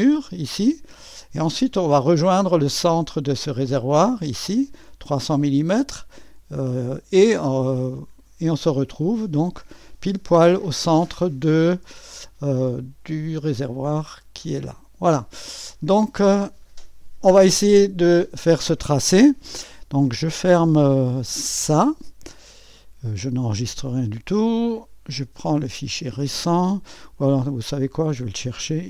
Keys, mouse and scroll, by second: 1.8-7.0 drag, 7.4 click, 9.4 right click, 11.2 click, 11.9 click, 11.9 3, 13.1 6, 16.3-17.3 drag, 21.8 click, 23.3 click, 24.7 click, 27.2 click, 28.4 click.